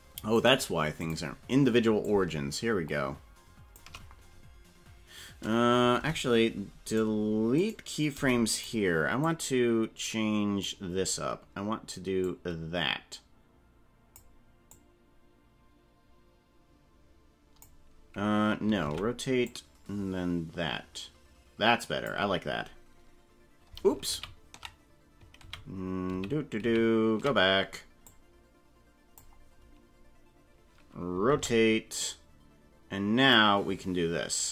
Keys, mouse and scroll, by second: 0.5 click, 2.1-3.9 shift+drag, 6.0 Delete, 7.6 right click, 8.1 Delete, 9.2-10.8 drag, 12.4-14.3 drag, 14.7-17.7 drag, 18.8 alt+r, 19.4-22.1 drag, 24.1 ctrl+z, 25.5 ctrl+z, 26.3 ctrl+z, 26.7 ctrl+z, 28.1-29.3 drag, 31.3 alt+r, 33.3-34.5 drag.